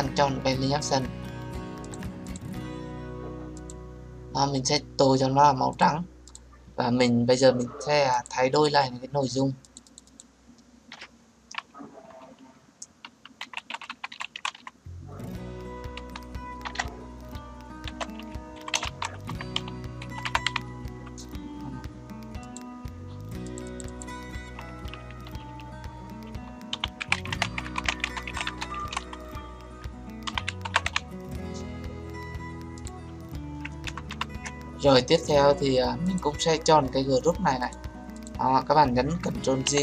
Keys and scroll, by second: 39.6 ctrl+j.